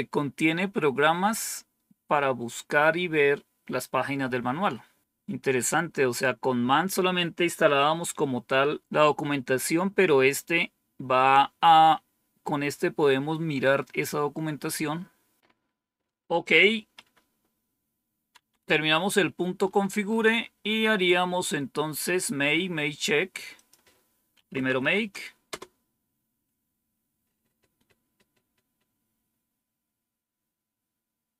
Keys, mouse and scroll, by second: 16.3 click, 16.9 Up, 18.2 End, 19.1-21.1 scroll up 1, 21.1-22.0 scroll down 2, 23.4 click, 24.0-25.2 typing, 25.3 Return.